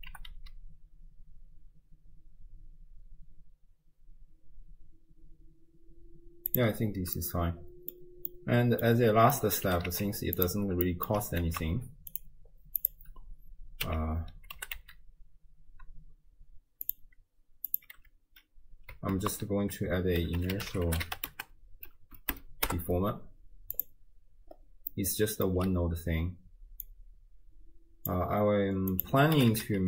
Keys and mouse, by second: 0.1 g, 7.2 click, 7.7 middle click, 8.3-9.0 drag, 9.4 click, 9.7 g, 10.9 click, 11.5 ctrl+a, 12.8 click, 13.9 m, 14.6 g, 17.7 click, 18.0 m, 19.2 ctrl+a, 24.9-25.5 middle drag, 26.8-28.2 drag, 29.1-29.8 drag, 29.5 5, 29.6 5.